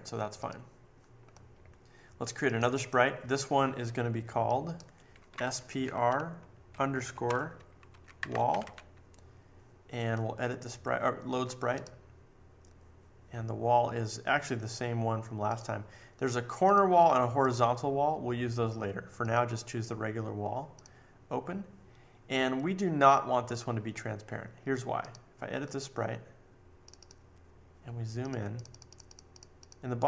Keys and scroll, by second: 5.0-9.2 typing.